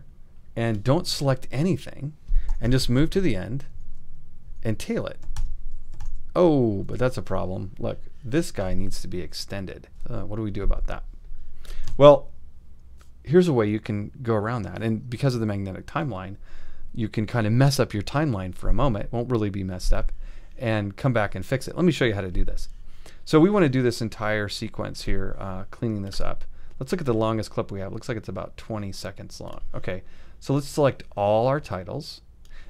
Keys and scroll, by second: 1.1 shift+super+a, 2.5 ', 3.8 ;, 5.2 alt+;, 5.3 alt+], 6.9 alt+super+], 6.9 alt+super+z.